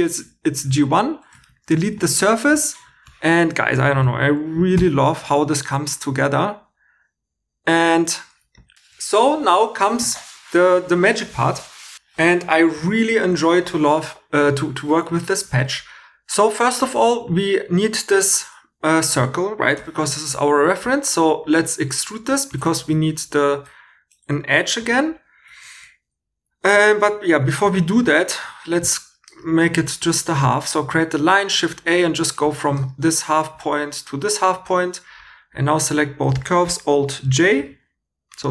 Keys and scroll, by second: 1.3 Tab, 1.7 x, 2.3 shift+e, 4.7 j, 20.6 e, 22.8 shift+e, 23.5 2, 24.5 h, 27.0 super+z, 27.3 super+z, 27.7 super+z, 30.8 shift+a, 35.5 2.